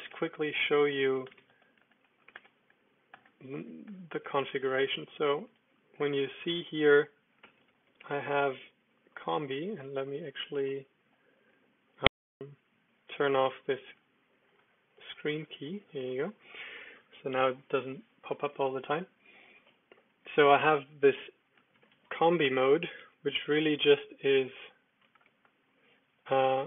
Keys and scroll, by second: 0.0-4.5 typing, 0.2 Return, 5.5 super+f, 5.7-8.4 typing, 9.1 super+k, 10.0 super+1, 10.6 super+2, 11.0 super+3.